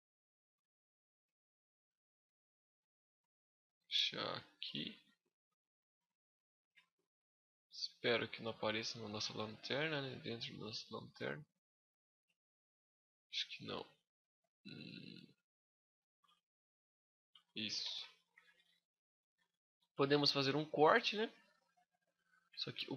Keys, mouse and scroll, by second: 0.3 right click, 0.8 z, 1.2 middle click, 2.4 click, 5.8 middle click, 6.2 z, 6.6 middle click, 10.1 z, 10.3 middle click, 10.8-11.6 scroll up 3, 11.6 middle click, 12.2 shift+middle click, 14.6 scroll down 1, 14.9 middle click, 15.7 shift+middle click, 16.2 scroll down 1, 16.4 middle click, 17.2 shift+middle click, 17.6 z, 17.8 middle click, 19.0 ctrl+r, 21.7 scroll up 2, 21.8 middle click.